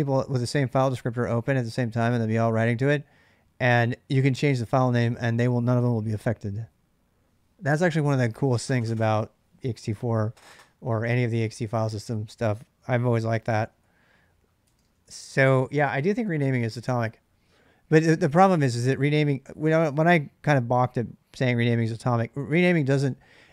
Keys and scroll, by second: 12.8-15.5 typing.